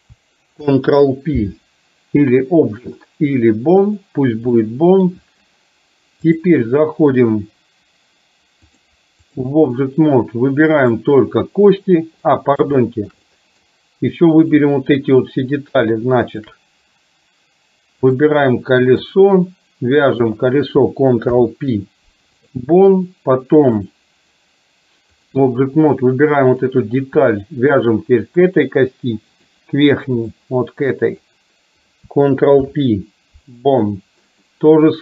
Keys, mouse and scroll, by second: 0.6 ctrl+p, 4.6-5.2 middle drag, 6.4-7.6 drag, 8.7-9.5 drag, 12.2 middle click, 12.9 shift+middle drag, 13.2-13.7 middle drag, 16.4 shift+click, 18.1-19.2 drag, 20.1 click, 21.4 ctrl+p, 23.7-25.5 drag, 27.9 shift+click, 29.4-30.5 drag, 31.4 click, 32.7 ctrl+p, 34.5-35.0 middle drag.